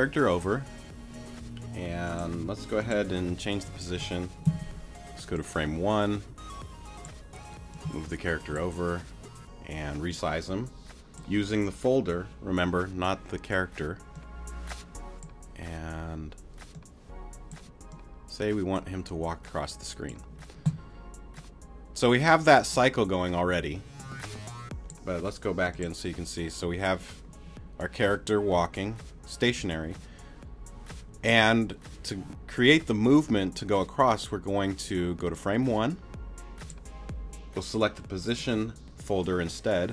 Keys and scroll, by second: 4.4 BackSpace.